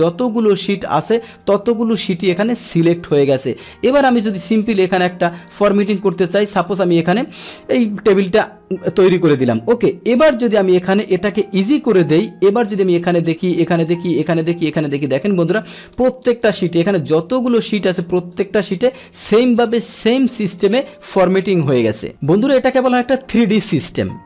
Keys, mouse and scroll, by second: 4.0 click, 4.7 click, 6.5 click, 7.7 click, 11.6 click, 12.8 click, 13.3 click, 13.8 click, 14.3 drag, 14.6 click, 15.8 click, 16.0 click, 16.3 click, 16.7 click, 17.5 click, 17.9 click, 18.3 click, 18.6 click, 21.3 click.